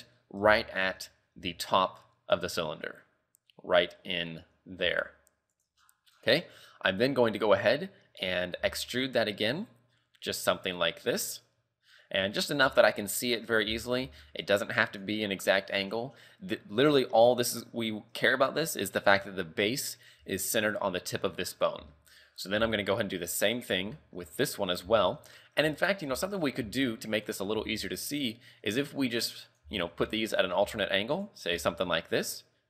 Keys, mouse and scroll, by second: 0.2-0.6 scroll up 7, 0.6 shift+middle click, 1.0-1.4 scroll up 1, 1.4 g, 5.8-6.3 scroll down 12, 6.6-7.5 scroll up 5, 8.2-8.6 scroll down 1, 8.6 e, 12.7 z, 12.8-13.5 scroll down 3, 13.5 scroll up 3, 13.7 z, 14.0 g, 15.7 scroll down 4, 17.0-19.3 scroll up 8, 19.3 scroll up 1, 19.3 z, 20.2 z, 21.5 scroll down 4, 21.9 shift+middle click, 22.4-22.7 scroll down 3, 22.7 shift+middle click, 23.0-23.3 scroll up 2, 23.6 right click, 24.0 shift+middle click, 24.3 scroll up 2, 25.0 shift+middle click, 25.4-25.8 scroll down 2, 26.2 shift+middle click, 26.7 a, 27.2 right click, 27.6 g, 29.7 z, 29.9 scroll down 3, 30.1 shift+middle click, 30.4 scroll up 3, 30.7 z, 31.1 right click, 31.6 e.